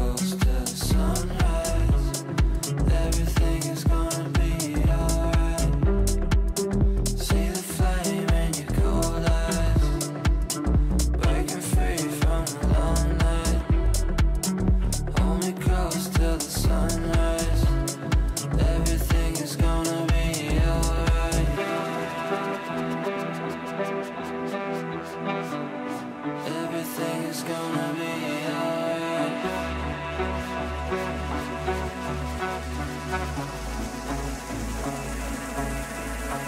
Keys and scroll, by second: 1.9 shift+Page_Down, 4.2 shift+F2, 4.6 Escape, 5.1 g, 28.0 Right.